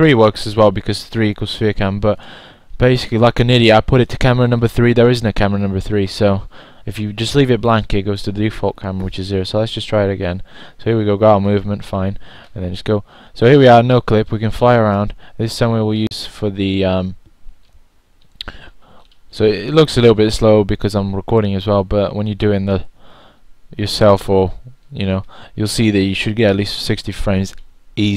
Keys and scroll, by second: 5.3 typing, 11.0-11.7 typing, 16.3-17.0 typing.